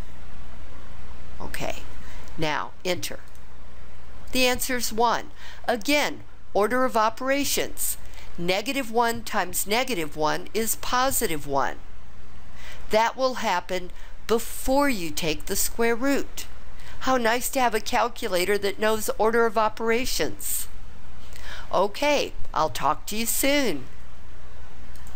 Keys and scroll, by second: 3.3 Return.